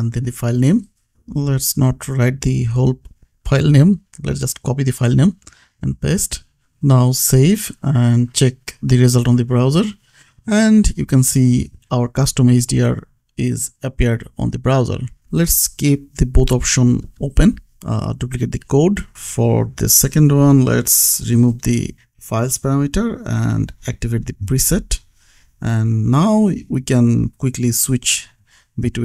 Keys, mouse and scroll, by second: 0.4 right click, 3.0 click, 3.0 F2, 3.9 click, 4.4 ctrl+c, 4.9 click, 6.4 ctrl+v, 8.3 click, 13.8 click, 16.9 alt+Down, 19.6 click, 21.0-24.3 typing, 24.5 Escape, 25.2 click, 25.5 ctrl+s, 26.0 click.